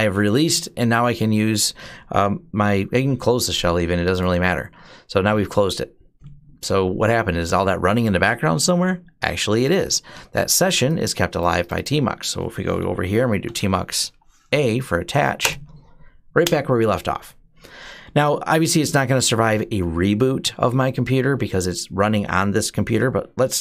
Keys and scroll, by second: 12.9-14.7 typing, 15.2 Return.